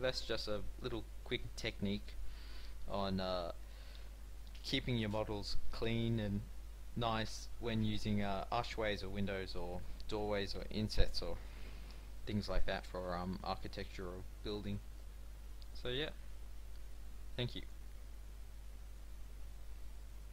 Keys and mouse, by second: 0.3 middle click.